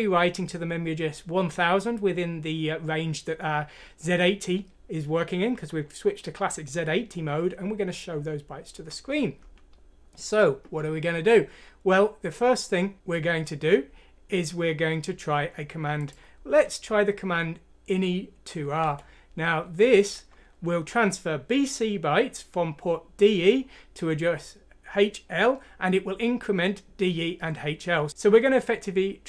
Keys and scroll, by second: 18.8 Delete.